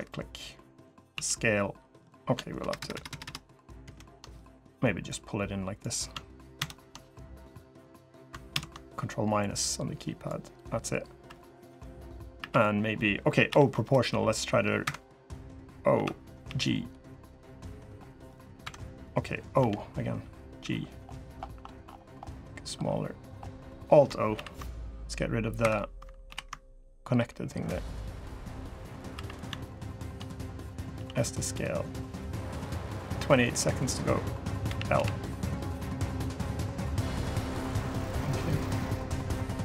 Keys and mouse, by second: 0.9 s, 2.4 ctrl+KP_Add, 3.7 ctrl+KP_Add, 3.7 ctrl+KP_Subtract, 10.3 ctrl+KP_Subtract, 10.3 click, 11.0 3, 11.3 click, 12.1 3, 13.2 o, 13.5 click, 13.8 g, 15.7 o, 16.2 g, 19.3 o, 20.3 g, 26.0 alt+o, 26.9 g, 28.9 3, 30.7 s, 34.4 l, 34.7 KP_1, 35.7 g, 37.8 middle click, 38.8 middle click, 39.4 l.